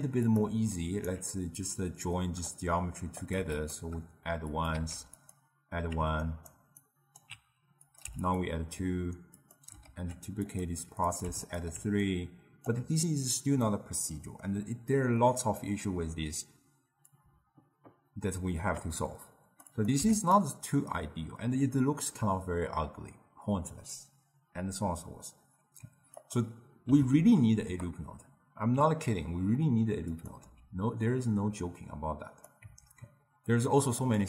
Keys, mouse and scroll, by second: 0.8-1.7 alt+right drag, 1.7-3.8 drag, 4.6 click, 4.8 shift+d, 6.3-7.9 alt+right drag, 7.9 click, 9.4 click, 9.9 ctrl+shift+d, 11.1 click, 12.1-13.7 alt+right drag, 13.7-16.8 middle drag, 17.2-20.4 drag, 26.2-29.4 drag, 30.2 click, 30.5 x, 32.4 click, 32.7 Tab, 34.1-34.2 drag.